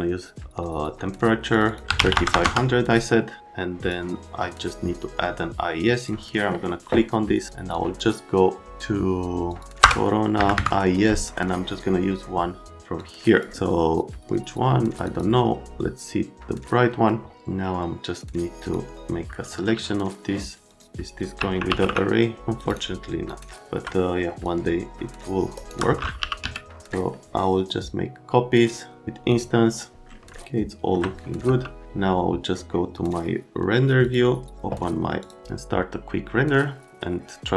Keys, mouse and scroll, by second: 1.5 click, 1.6 click, 1.9 KP_3, 2.0 KP_5, 2.1 KP_0, 2.3 KP_0, 2.4 KP_Enter, 3.4 click, 6.0 click, 9.8 Return, 10.3 Down, 10.5 Down, 18.6 click, 20.7 click, 21.1-22.3 typing, 22.4 click, 22.6 right click, 23.3 right click, 23.7 alt+middle click, 24.4 shift+click, 25.5 shift+right click, 25.9-26.9 typing, 30.4 alt+middle click, 31.4 z, 33.0 click, 34.0 click, 35.2 click, 35.4 Escape.